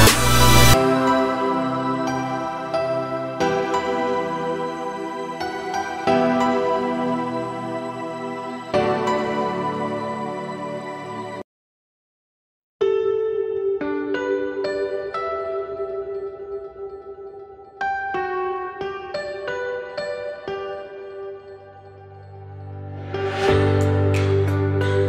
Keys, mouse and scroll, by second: 0.7 scroll down 1, 0.8 middle click, 1.3 `, 1.7 z, 1.9-2.5 scroll up 8, 2.5 shift+middle click, 2.8-3.5 scroll up 10, 3.5 shift+middle click, 3.7-4.4 scroll up 7, 4.4 shift+middle click, 4.7 scroll up 4, 5.1 g, 7.6-8.5 scroll up 7, 7.9 shift+middle click, 8.5 g, 10.5 g, 11.9 z, 12.3-13.7 scroll down 31, 13.7 middle click, 14.2-14.7 scroll down 12, 14.7 middle click, 15.3 Tab, 15.5-15.9 scroll down 4, 15.9-16.3 shift+middle drag, 16.3 click, 16.6-17.0 middle drag, 17.0-17.4 scroll up 4, 17.4 ctrl+s, 17.6 click, 19.1 click, 19.9-20.3 middle drag, 20.3 click, 20.6 middle drag, 20.8-21.9 scroll up 4, 21.9 click, 22.2 shift+middle drag, 22.4-23.0 scroll up 3, 23.0 g.